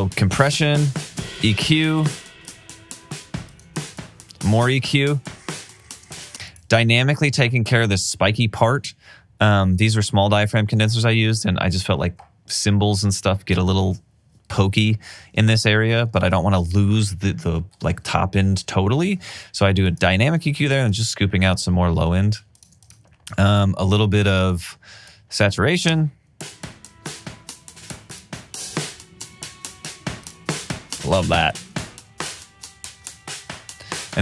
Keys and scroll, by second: 1.7 alt+super+w, 6.2 space, 21.5 alt+super+w, 26.1 space, 29.6 alt+super+w.